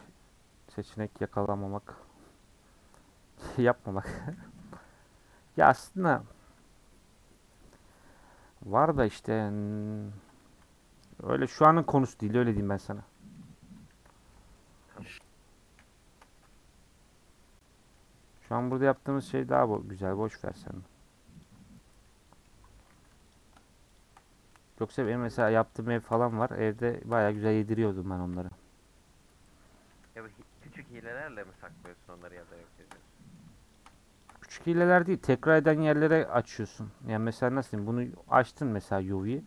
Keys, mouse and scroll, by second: 0.5-1.7 middle drag, 1.7 scroll down 1, 2.0-4.0 middle drag, 4.0-4.4 scroll up 1, 4.4 Tab, 4.7-9.0 scroll down 5, 9.0 scroll down 1, 9.1 Tab, 9.4-10.1 scroll up 4, 10.1 Tab, 10.5 h, 10.7-11.2 scroll down 9, 11.2-11.8 middle drag, 11.8 click, 13.2-13.9 middle drag, 13.9 KP_Decimal, 14.3-15.8 middle drag, 15.8 /, 16.2 Tab, 16.5-18.1 middle drag, 18.1-18.7 scroll up 2, 18.7 alt+click, 19.9-21.4 middle drag, 21.4 alt+click, 22.0 middle click, 22.5-22.9 scroll up 4, 22.9 3, 23.3 click, 24.0 shift+click, 24.2-25.5 middle drag, 25.5 shift+click, 25.8 shift+click, 26.3 ctrl+z, 26.8 shift+click, 27.4 middle click, 28.3 ;, 29.9 3, 30.6 alt+click, 30.9 middle click, 32.1 click, 32.8 shift+click, 33.0 middle click, 33.7 shift+click, 34.2 shift+click, 36.6-37.6 scroll down 3, 37.6 a, 38.4 u, 39.3 click.